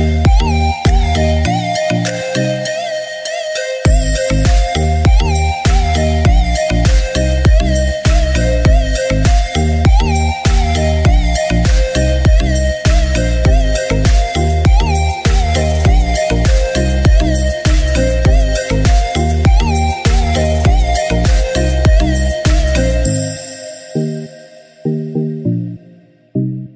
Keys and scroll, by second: 3.2 ctrl+i, 4.1-5.9 typing, 7.8-9.4 typing, 10.9 typing, 13.9-17.1 typing, 20.6-21.9 typing, 24.5 typing, 26.0 typing.